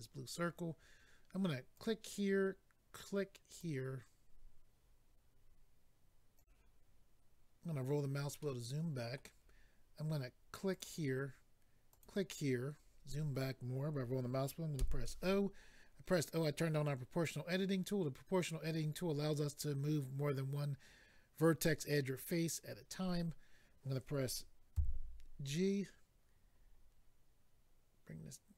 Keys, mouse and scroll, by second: 1.7 click, 1.8 click, 3.6 click, 6.3 click, 6.4 click, 7.6-8.4 scroll down 3, 8.4 middle click, 10.7 click, 11.9 click, 12.7-13.2 scroll down 1, 14.0 scroll down 1, 26.2-27.1 scroll down 4.